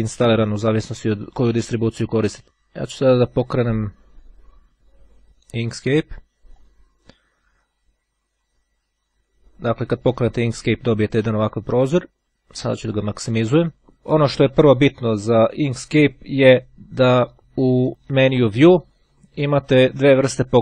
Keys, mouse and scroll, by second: 3.9 click, 6.6 click, 11.5-13.5 drag, 15.3-17.0 drag.